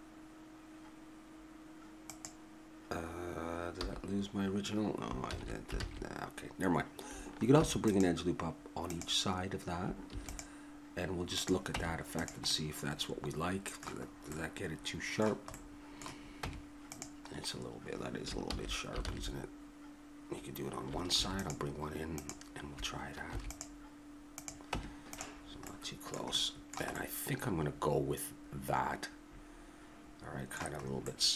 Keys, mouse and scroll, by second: 3.8 a, 5.3 ctrl+z, 5.8 ctrl+z, 7.5 ctrl+r, 10.1 ctrl+r, 11.8 Tab, 12.5 middle click, 14.8-16.7 middle drag, 16.4 Tab, 17.4-18.5 middle drag, 18.5 ctrl+z, 19.0 ctrl+z, 21.1 ctrl+r, 23.3 ctrl+r, 24.7 Tab, 30.8-31.3 middle drag.